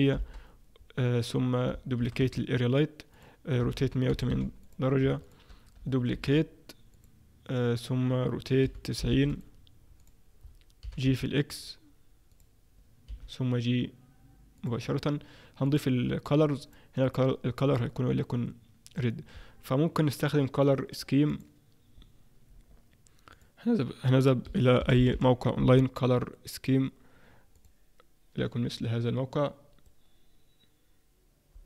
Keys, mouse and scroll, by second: 2.0 shift+d, 3.6 r, 5.2 shift+click, 6.1 shift+d, 8.6 r, 10.0 click, 10.8 g, 12.3 click, 13.1 g, 15.6 click, 16.6 click.